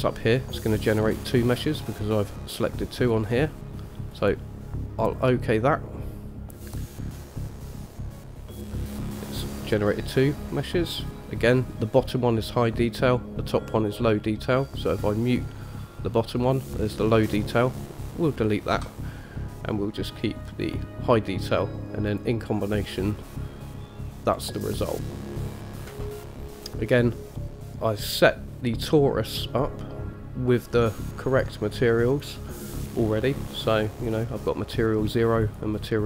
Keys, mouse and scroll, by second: 15.5 click, 17.5 click, 18.9 Delete, 20.8 click, 22.3 click, 22.9-24.1 middle drag, 24.5-25.0 scroll up 2, 25.0-25.6 middle drag, 26.8-28.5 scroll down 2, 31.1 click, 31.5 click, 32.3 click, 34.1 click, 35.6 click.